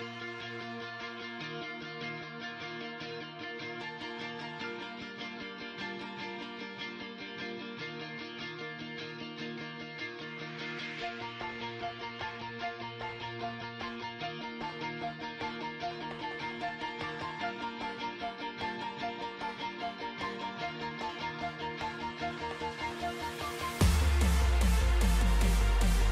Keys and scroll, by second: 0.1 super+-, 7.2 ctrl+c, 7.7 super+=, 15.7 alt+Down, 17.1 super+-, 17.4 super+s, 20.3 ctrl+c.